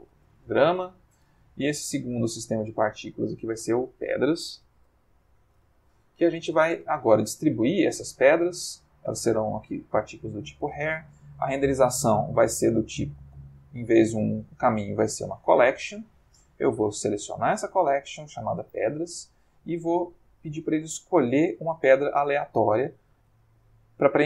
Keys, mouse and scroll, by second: 0.2 shift+g, 0.3 shift+r, 0.4 shift+a, 0.5 shift+m, 0.7 shift+Return, 2.3 click, 3.2 click, 4.4-5.8 typing, 7.6 click, 8.6 click, 10.4-11.0 middle drag, 12.1 click, 15.4 click, 17.0 click, 18.1 click, 19.2 middle click, 21.1 click, 22.5 shift+middle click, 23.4 ctrl+shift+middle click.